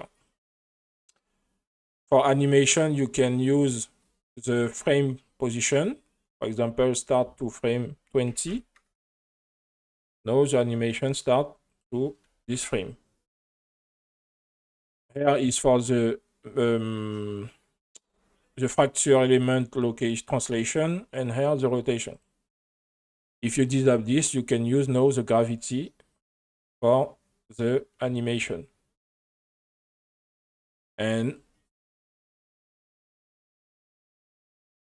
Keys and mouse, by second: 7.5-8.9 drag, 10.3 click, 11.7 click, 12.4 space, 13.7 space, 15.6-20.3 drag, 21.2-22.2 drag, 23.7 click, 25.0-30.0 drag, 31.3 click, 34.5 F7.